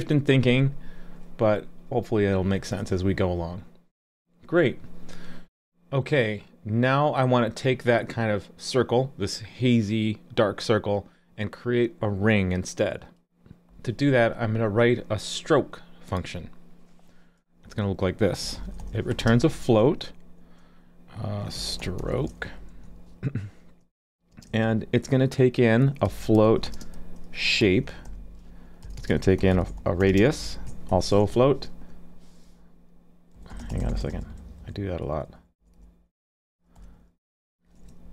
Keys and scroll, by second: 37.8 ctrl+e.